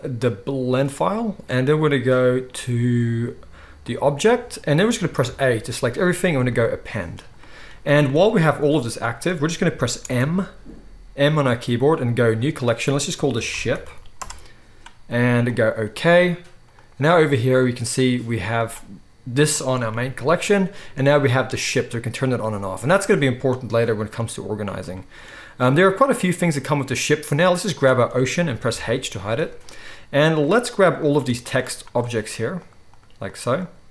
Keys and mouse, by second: 4.8-9.1 middle drag, 8.5 g, 9.1-16.8 drag, 9.9 m, 16.8-17.6 middle drag, 17.6 click, 17.7-18.6 middle drag, 18.6-19.4 drag, 19.4-21.0 middle drag, 19.8 g, 21.0 click, 21.1 middle click, 21.7 click, 22.0 middle click, 22.1 click, 22.2-27.7 middle drag, 27.7-28.6 drag, 28.6-30.9 middle drag, 28.6 h, 30.9 click, 31.0-31.3 shift+middle drag, 31.3 shift+click, 31.4-31.7 shift+middle drag, 31.7 shift+click, 31.9 shift+middle click, 32.1 shift+click, 32.6 shift+drag, 32.8 shift+click, 33.5 shift+click.